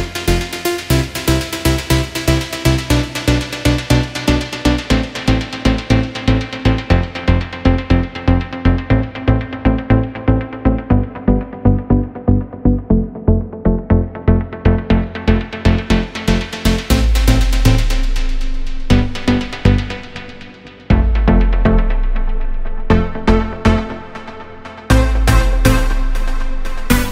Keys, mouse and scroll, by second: 0.5-0.8 scroll up 2, 0.8-1.3 shift+middle drag, 1.3-1.8 scroll up 2, 1.8-3.3 shift+middle drag, 3.7 click, 4.2 click, 4.4 drag, 4.9-6.5 drag, 7.0 click, 7.7 click, 9.1-10.6 drag, 11.8 click, 12.1 click, 12.9 click, 14.1 click, 15.3 shift+middle click, 15.6 shift+a, 16.7 scroll down 2, 16.7-17.4 middle drag, 17.4 g, 18.4 g, 19.2 KP_0, 19.7 shift+f, 20.6 right click, 20.8 s, 22.0 g, 22.6 s, 24.3 right click, 24.6 right click, 25.0 Tab, 25.8-27.1 drag.